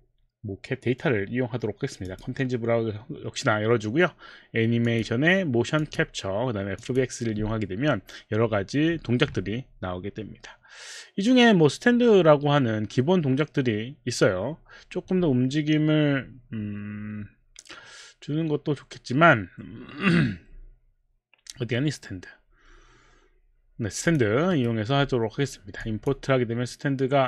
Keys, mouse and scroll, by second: 2.0 click, 4.9 click, 6.8 click, 24.0 click, 24.6 right click, 25.8 click.